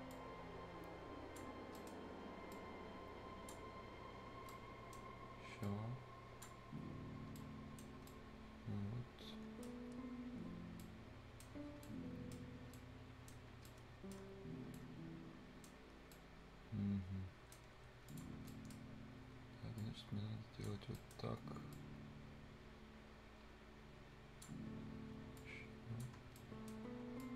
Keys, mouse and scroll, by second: 0.1-1.6 ctrl+drag, 1.6 scroll up 1, 1.8 right click, 2.5-4.4 drag, 4.4 scroll down 1, 4.5 right click, 5.0 scroll up 1, 5.6-7.4 drag, 7.4 right click, 7.9 scroll down 1, 8.1 right click, 9.8 scroll down 1, 10.8 right click, 11.6 scroll up 1, 11.8 right click, 12.6 scroll up 1, 12.7 right click, 13.4 scroll up 1, 13.7 right click, 14.2 scroll down 1, 14.4 scroll up 1, 14.7 right click, 15.9 scroll down 1, 16.1-17.8 right drag, 17.8 Escape, 17.9 scroll up 1, 18.1 click, 18.3 scroll down 1, 18.5 right click, 18.9 scroll up 1, 19.8 click, 20.8 scroll down 1, 20.9 right click, 21.0 right click, 21.3-21.6 scroll up 1, 21.7-24.6 drag, 24.6-25.4 scroll up 1, 25.4 click, 26.2 scroll down 1, 26.4 right click, 26.8 scroll up 1, 27.2-27.3 drag.